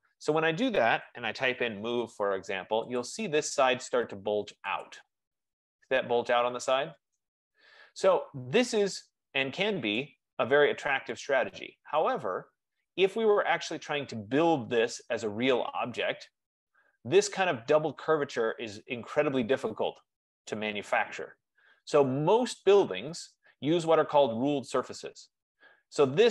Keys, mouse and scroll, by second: 1.0-2.0 typing, 3.1 click, 4.9 typing, 5.0 click, 10.3 right click, 10.8-11.3 scroll, 12.2 right click, 13.0 click, 14.0 click, 24.0 right click, 25.0-25.4 scroll.